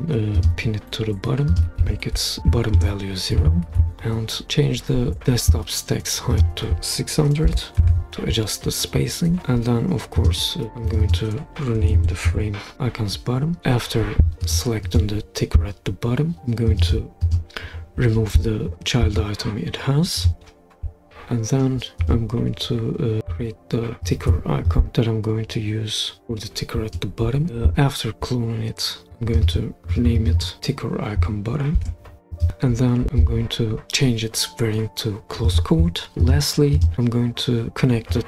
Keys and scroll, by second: 1.8 0, 2.8 Return, 7.3-8.4 typing, 11.8-12.7 typing, 12.7 Return, 31.8 typing.